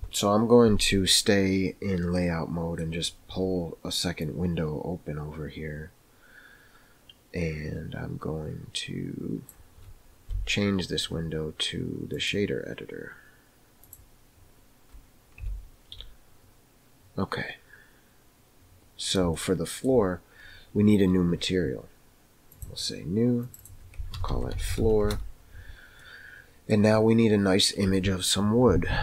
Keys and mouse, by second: 2.3-3.0 middle drag, 4.4-9.5 drag, 10.3 n, 12.2-14.0 drag, 15.4 n, 19.3-19.9 shift+middle drag, 22.6 click, 23.5 click, 24.0 shift+click, 24.7 o, 26.1 middle click.